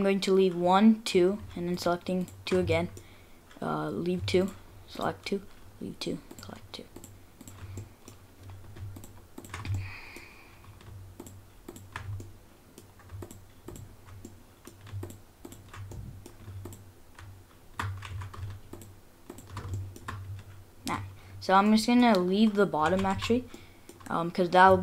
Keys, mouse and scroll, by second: 1.7 alt+shift+click, 2.2 alt+shift+click, 2.7 shift+middle click, 4.4 alt+shift+click, 5.0 alt+shift+click, 6.3 alt+shift+click, 7.0 alt+shift+click, 7.4 alt+shift+click, 7.8 shift+middle click, 9.0 alt+shift+click, 9.4 alt+shift+click, 9.7 shift+middle click, 11.2 alt+shift+click, 11.7 alt+shift+click, 12.2 shift+middle click, 12.7 shift+middle click, 13.2 alt+shift+click, 13.7 alt+shift+click, 14.2 shift+middle click, 15.0 alt+shift+click, 15.5 alt+shift+click, 15.9 shift+middle click, 16.7 alt+shift+click, 18.1 ctrl+z, 18.7 alt+shift+click, 19.3 alt+shift+click, 19.7 shift+middle click, 21.2-21.7 scroll down 3, 21.7 middle click, 22.9 ctrl+z, 23.2 ctrl+z, 23.5 middle click, 24.0 scroll up 1.